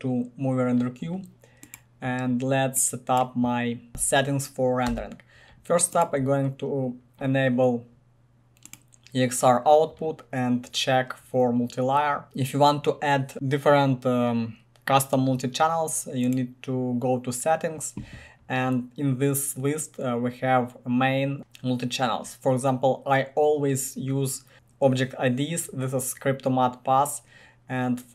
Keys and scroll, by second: 4.9 Delete.